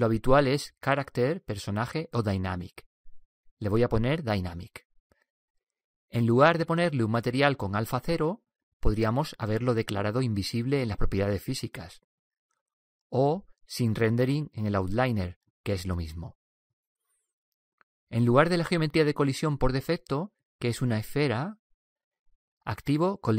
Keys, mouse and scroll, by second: 12.2-15.2 drag, 21.4-23.3 drag.